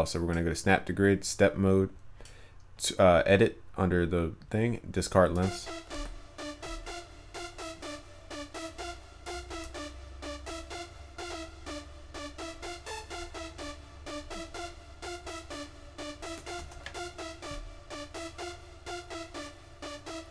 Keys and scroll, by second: 16.8 ctrl+s.